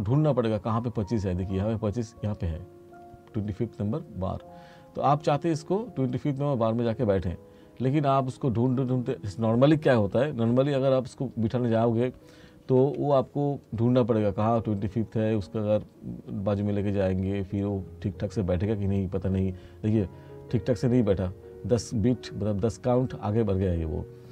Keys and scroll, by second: 12.9 F2.